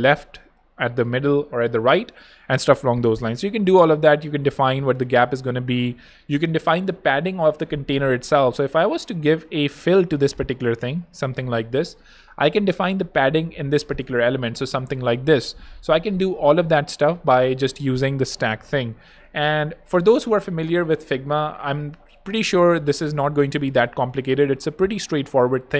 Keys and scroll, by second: 13.3-14.2 typing.